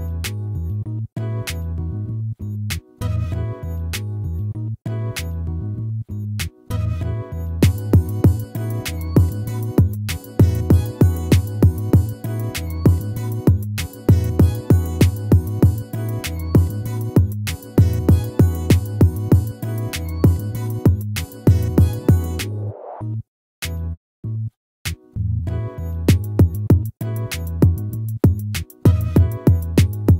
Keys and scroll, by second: 1.1 ctrl++, 3.4 ctrl++.